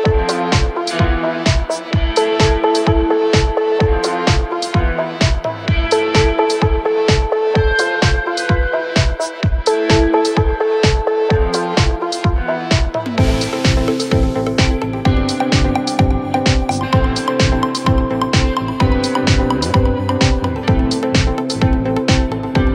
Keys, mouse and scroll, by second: 0.3 double click, 0.4 double click, 1.7 scroll down 5, 2.1 space, 2.3 double click, 2.4 double click, 3.9 space, 4.2 middle click, 4.8-5.1 scroll up 7, 5.8 scroll up 2, 5.8 double click, 6.1 right click, 6.9 scroll down 4, 7.1 middle click, 7.4 middle click, 8.2 middle click, 8.7 double click, 8.8 double click, 11.1 scroll up 1, 12.4-12.8 scroll down 1, 12.8 scroll up 4, 13.1 scroll down 9, 14.8-15.5 typing, 14.9 double click, 16.2 scroll down 5, 16.3 middle click, 16.6-16.9 scroll up 10, 17.2 middle click, 17.7 middle click, 18.1 middle click, 18.4 scroll up 1, 19.5 right click, 21.3 scroll up 1, 21.5 double click, 21.7 middle click, 22.2 middle click, 22.4 scroll down 1, 22.6 scroll up 2.